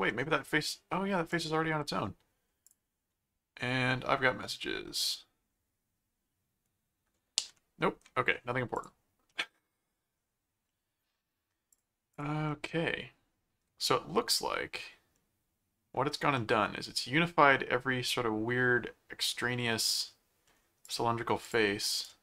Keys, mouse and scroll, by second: 0.1 middle click, 1.3 click, 2.7 click, 8.8 click, 9.3 middle click, 10.7 middle click, 11.7 click, 12.5-15.9 middle drag, 16.4-20.5 middle drag, 20.8 click, 21.6 click, 22.0 right click.